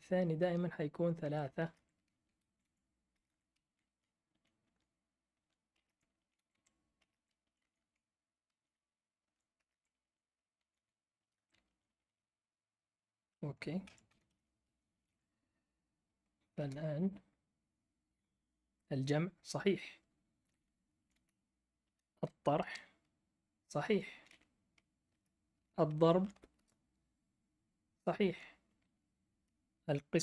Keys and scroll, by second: 0.3 Right, 1.2 Right, 1.6-3.6 typing, 3.8 Down, 4.3 Down, 4.6 Right, 5.3 Right, 5.8-7.1 typing, 7.4 Down, 7.6 Down, 7.8 Down, 8.5 Right, 9.3 Right, 9.6-12.1 typing, 10.0 Down, 13.5-14.8 typing, 16.5 Return, 17.8-18.5 typing, 20.7-22.2 typing, 22.6 Return, 24.1 Up, 24.3 Up, 25.1 BackSpace, 26.0 *, 26.5 Return, 28.6 Left, 28.8 Left.